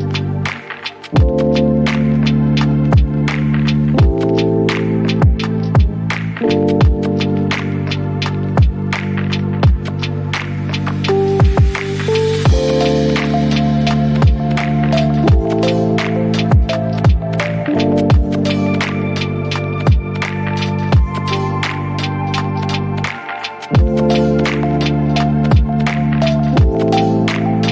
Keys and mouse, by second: 0.0 shift+middle click, 0.3 middle click, 0.5 shift+middle click, 0.7 middle drag, 0.9 shift+middle click, 3.9 middle click, 4.1 click, 4.4 o, 7.1 middle click, 7.3 shift+middle click, 7.5 shift+middle click, 9.2 middle drag, 9.8 shift+middle click, 10.1 shift+middle click, 11.0 click, 11.4 KP_Decimal, 11.6 click, 11.9 s, 12.8 click, 13.8 click, 14.0 click, 14.3 r, 15.2 click, 15.7-16.1 middle drag, 16.3 click, 16.4 middle click, 16.6 shift+middle click, 17.7 middle click, 18.1 KP_Decimal, 18.6 r, 20.3 click, 20.8 middle click, 22.8 click, 23.1 r, 24.3 click, 24.6 click, 24.7 click, 26.0 r, 27.1 KP_7, 27.5 shift+middle click.